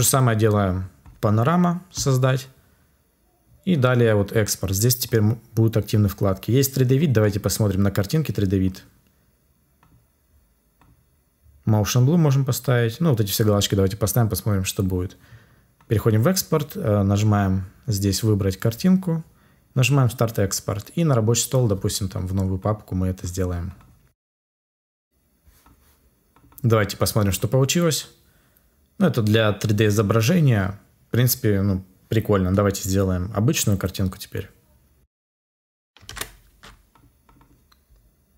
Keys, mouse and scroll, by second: 35.5 F2, 35.5 Return.